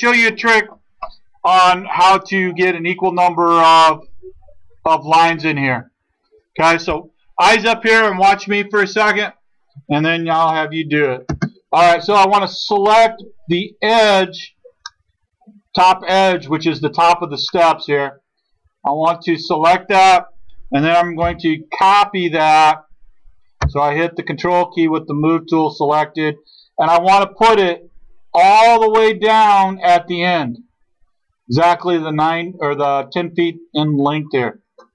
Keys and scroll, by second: 11.3 space, 21.3 m.